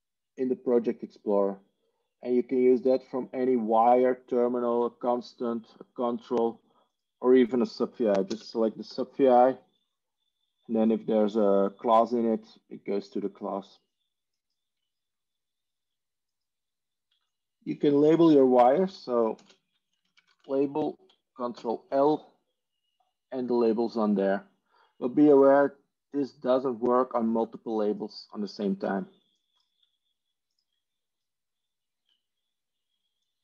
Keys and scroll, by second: 8.9 ctrl+space, 8.9 ctrl+g, 19.5 ctrl+space, 19.6-20.8 typing, 21.4 ctrl+l.